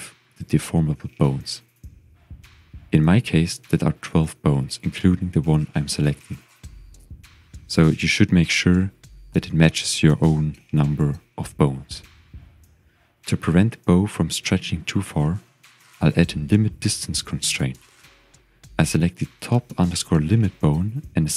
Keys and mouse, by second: 6.1-7.4 drag, 7.1 KP_1, 15.1 click, 18.5 click.